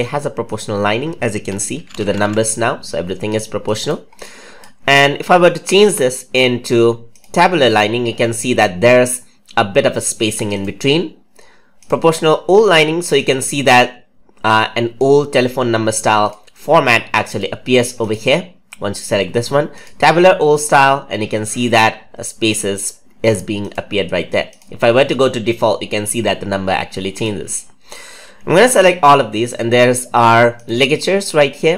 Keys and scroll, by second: 28.6 ctrl+a.